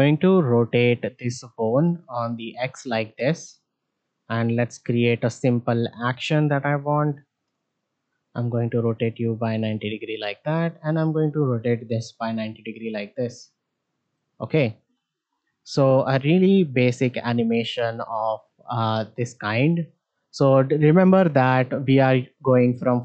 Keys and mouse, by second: 5.1 shift+middle drag, 6.0 click, 10.6 shift+middle click, 14.7 shift+middle drag, 15.9-20.4 drag.